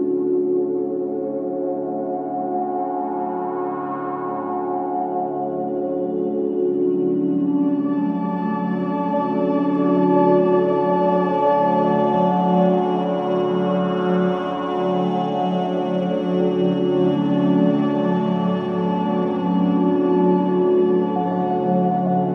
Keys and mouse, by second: 0.4-1.2 typing, 1.9 click, 3.1 click, 5.3-7.8 alt+drag, 8.2 typing, 8.8-10.4 ctrl+alt+drag, 10.6 ctrl+alt+click, 11.6-13.4 alt+drag, 13.8-14.7 typing, 15.8-16.5 typing, 17.3-18.5 alt+shift+drag, 19.1-19.6 typing, 20.6 click, 21.0-21.7 typing.